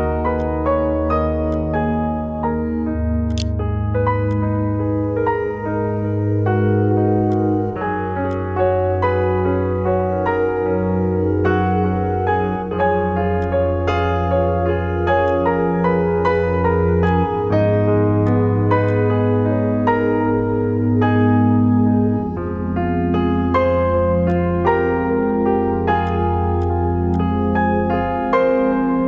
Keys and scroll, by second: 2.6-3.5 typing, 3.6 ctrl+1, 29.0 Escape.